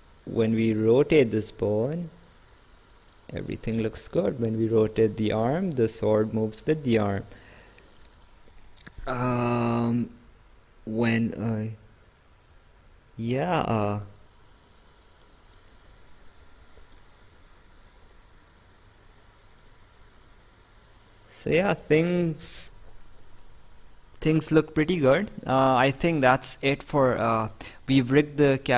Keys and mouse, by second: 3.8 ctrl+z, 5.0 click, 7.0 ctrl+z, 7.6 right click, 14.1 click, 16.8 Escape, 18.1 click, 19.6 click, 22.3 ctrl+z, 23.4 right click.